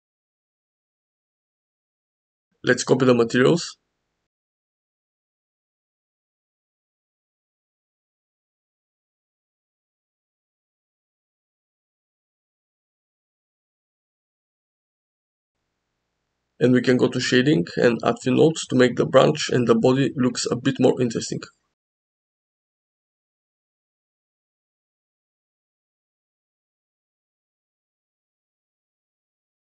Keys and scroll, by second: 1.4 g, 4.3 ctrl+l, 6.9 ctrl+l, 9.4 KP_0, 13.0 g.